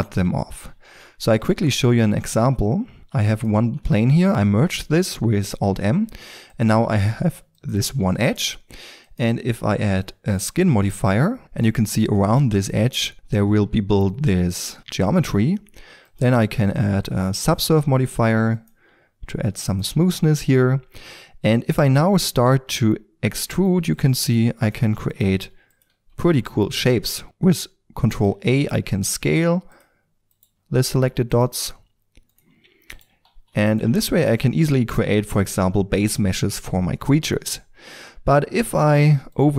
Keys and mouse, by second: 0.8 shift+a, 1.7 Tab, 3.0 alt+m, 4.2 g, 6.2 e, 6.6-12.0 drag, 6.6 e, 7.1 e, 13.1-14.2 middle drag, 16.0-21.7 drag, 21.7-22.3 middle drag, 22.3 click, 22.7 e, 24.0-25.1 drag, 25.1 e, 25.3 e, 25.8 e, 27.2 alt+s, 28.3 ctrl+a, 30.3 click, 30.8 ctrl+a, 32.5 click, 33.2 ctrl+a, 34.0-36.4 middle drag, 37.8 e, 38.8-39.3 drag.